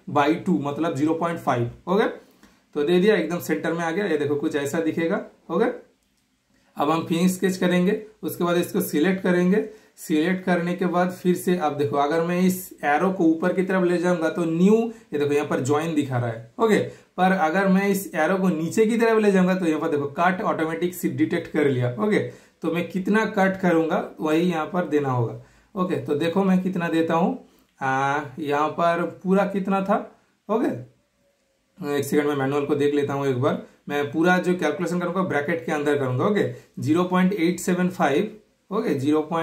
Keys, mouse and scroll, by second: 0.1 super+/, 0.1 typing, 0.7 super+Return, 1.6-2.3 typing, 1.6-3.3 super+middle drag, 3.4 super+middle click, 3.4 typing, 3.5-6.4 shift+super+middle drag, 7.3 super+click, 7.3 typing, 9.0 super+click, 9.0 typing, 10.1 super+click, 10.1 typing.